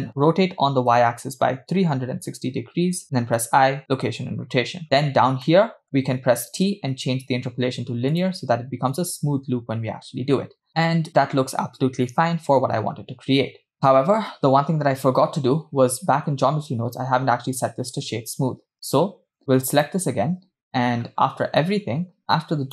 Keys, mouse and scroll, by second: 0.2 r, 3.4 i, 5.1-5.5 scroll down 3, 5.5 middle click, 7.8 t, 9.1 space, 18.7 space, 19.8 click, 20.7 scroll down 2, 21.3 scroll down 3, 21.6 middle click, 22.3 click.